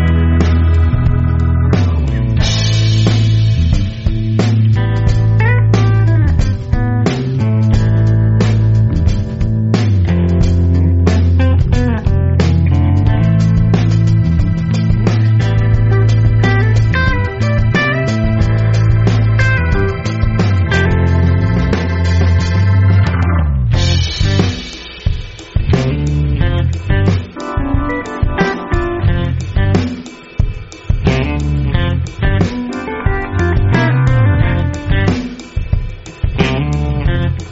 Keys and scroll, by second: 1.3 a, 2.1-3.0 space, 8.6 space, 9.1 super+space, 9.2-9.7 super+space, 15.5 space, 16.1 alt+super+space, 16.2 alt+super+space, 16.8 alt+super+space, 16.9 alt+super+space, 36.7 v, 37.3 space.